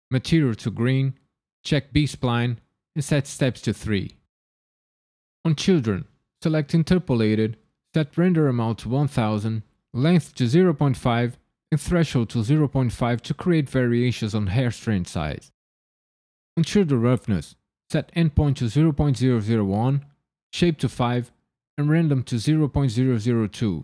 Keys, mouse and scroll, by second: 3.7 scroll down 3, 5.4 click, 6.7 click, 7.1-8.0 scroll down 3, 8.0 click, 8.9 KP_0, 16.5 click, 17.0-17.9 scroll down 3, 18.1 click, 19.2 KP_0, 22.8 KP_0.